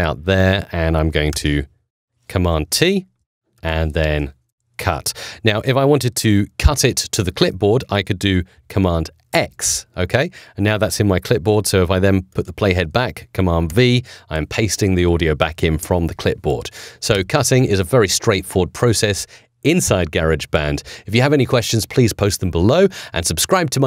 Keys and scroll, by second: 1.2 t, 2.7 super+t, 9.2 super+x, 13.6 super+v, 17.0 BackSpace.